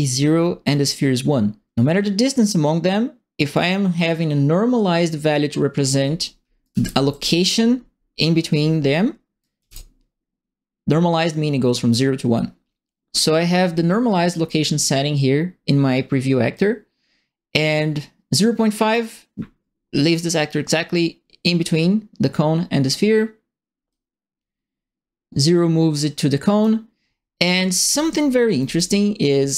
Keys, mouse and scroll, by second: 6.4-7.3 typing, 6.6 right click, 9.4 right click, 9.5 s, 16.5-18.9 drag, 23.9-26.6 drag, 27.4-28.4 typing, 27.5-28.7 right drag.